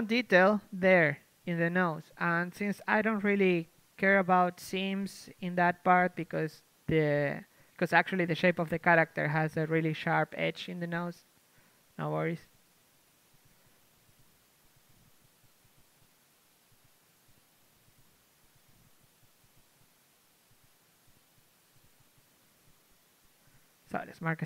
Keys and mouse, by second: 5.0 middle click, 5.7-6.8 right drag, 6.8-9.0 middle drag, 9.9 right click, 10.1-11.8 middle drag, 12.8-15.6 middle drag, 18.4 right click, 18.4 c, 18.6-20.4 middle drag, 20.4-23.2 drag, 22.0 ctrl+e, 23.2 KP_1, 24.2 KP_3.